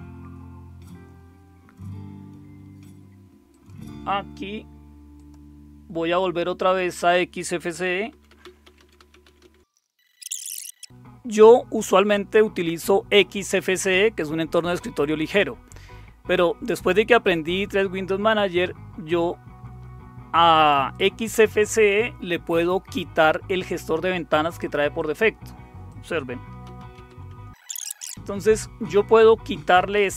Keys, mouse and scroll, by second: 3.5 click, 5.1 click, 5.5-7.6 drag, 7.8-10.5 typing, 15.2 click, 20.9 click, 24.9 click, 25.9 click, 26.4-27.6 typing, 26.8 click, 27.8 click.